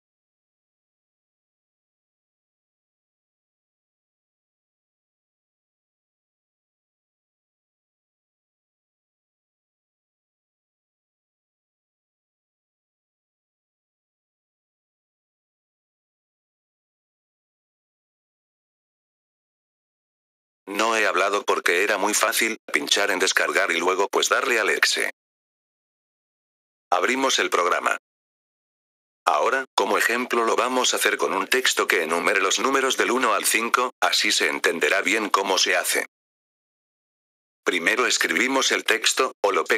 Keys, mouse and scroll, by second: 1.0-2.3 drag, 10.5 click, 13.1 click, 19.5 F4, 20.5 click, 26.3 F4, 26.8 click, 28.6 F4, 29.1-30.9 drag, 32.8 click, 33.9-35.4 typing, 35.9 Return, 36.8-38.9 typing.